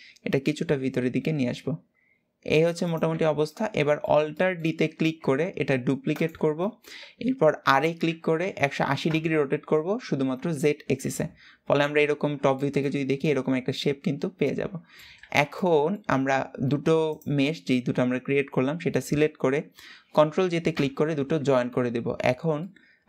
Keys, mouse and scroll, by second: 0.7 g, 2.9 Tab, 3.2-4.7 middle drag, 4.7 alt+d, 6.3-7.3 shift+middle drag, 7.3 r, 10.5 KP_7, 11.7-12.3 scroll up 1, 12.3-14.9 shift+middle drag, 14.9 alt+z, 15.2-16.8 middle drag, 16.8 shift+click, 20.4 ctrl+j, 21.3 Tab, 21.9 scroll down 2, 22.3-23.0 middle drag.